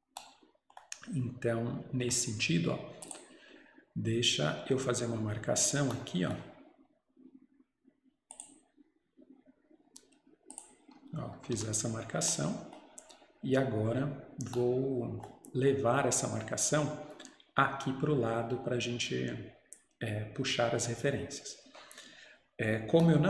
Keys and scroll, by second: 11.6 Escape.